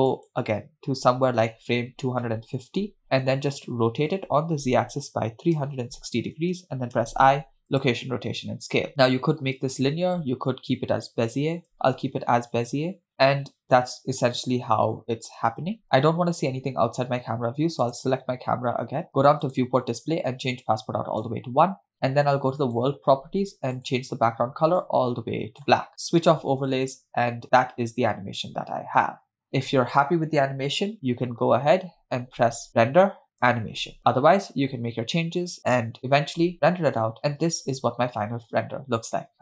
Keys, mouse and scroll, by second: 0.6 click, 3.2 Right, 4.5 r, 8.9 click, 11.9 space, 12.6 KP_0, 15.8 space, 17.9 click, 19.5 click, 20.3 scroll down 2, 21.3 click, 22.7 click, 23.8 click, 26.2 click, 27.1 space, 32.7-34.1 drag.